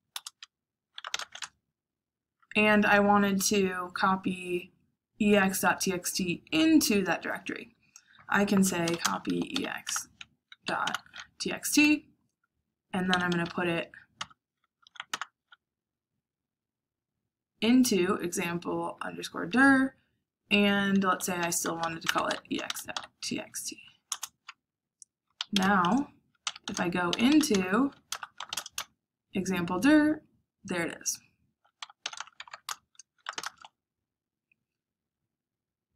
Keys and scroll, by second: 0.1 Return, 0.7-1.6 typing, 8.5-11.1 typing, 12.8-15.3 typing, 14.1 Tab, 20.8-23.5 typing, 24.0 Return, 25.0-28.8 typing, 31.5-33.7 typing.